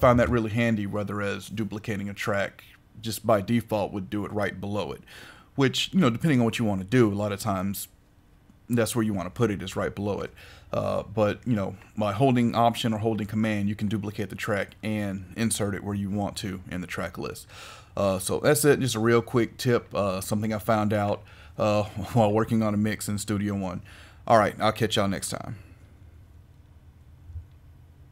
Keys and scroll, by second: 0.1 super+z.